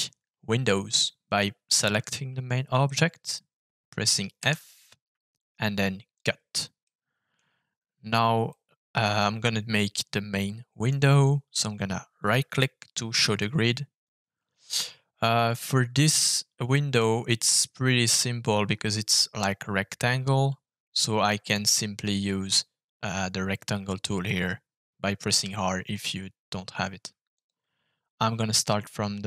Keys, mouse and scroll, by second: 4.3 f, 6.8 middle click, 8.4-10.8 middle drag, 12.2 right click, 15.5-16.9 middle drag, 27.3-29.2 shift+drag.